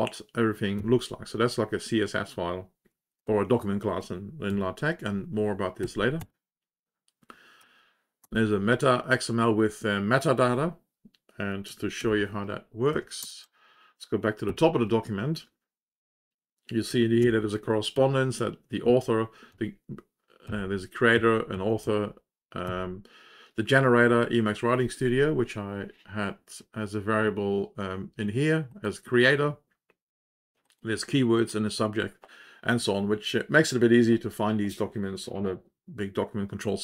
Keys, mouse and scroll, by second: 1.1 ctrl+End, 3.1 ctrl+Home, 7.5 Down, 8.3 Return, 13.5 Return, 17.9-18.9 Down, 19.4 Up, 20.4 Down, 21.1 Down, 21.5 Down, 21.8 Down, 22.6 Down, 28.6 click, 31.3 click, 31.4 click.